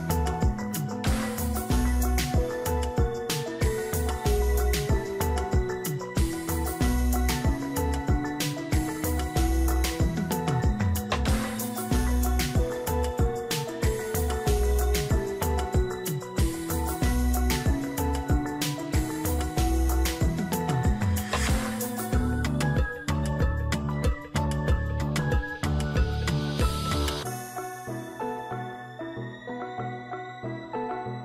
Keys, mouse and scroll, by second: 0.8 shift+click, 13.1-14.3 scroll up 1, 18.0 ctrl+-, 26.0 right click.